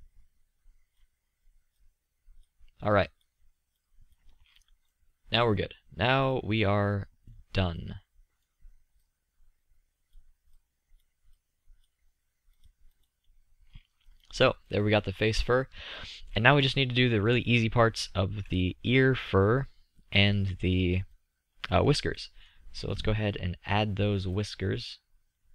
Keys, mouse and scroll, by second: 1.3 middle click, 3.0-5.0 middle drag, 5.2 middle click, 5.7-8.5 middle drag, 9.2-13.1 drag, 14.8 middle click, 25.1-25.5 drag.